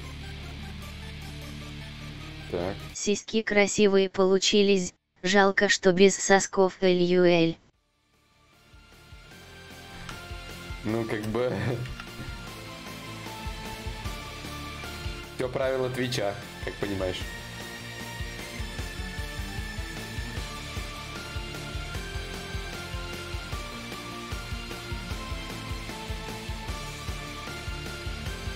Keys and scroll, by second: 6.8 q.